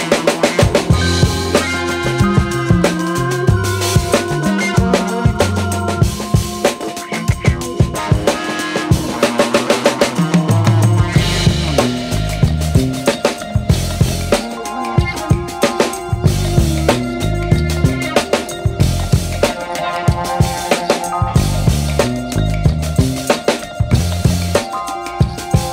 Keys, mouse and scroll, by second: 2.5-2.8 scroll down 1, 4.9-7.4 drag, 10.2 click, 13.6-20.0 drag, 20.5-22.5 scroll up 1, 23.5 scroll down 1, 25.6-25.7 scroll down 1.